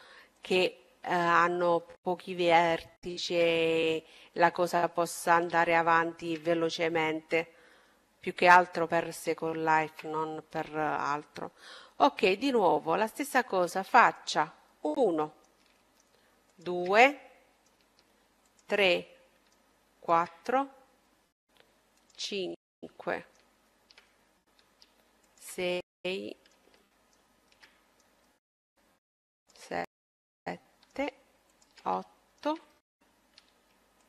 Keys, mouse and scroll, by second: 0.6 middle click, 1.6-8.1 middle drag, 9.9 a, 12.4-14.2 drag, 13.4-15.3 right drag, 14.0-16.6 middle drag, 15.7-17.3 right drag, 17.3-18.9 middle drag, 18.6 right click, 20.0 right click, 21.2 middle click, 22.2-23.6 middle drag, 22.2-23.6 right drag, 24.1-27.3 middle drag, 25.0-27.0 right drag, 27.3 right click, 29.2-34.0 middle drag, 29.2-32.6 right drag, 33.0-34.0 right drag.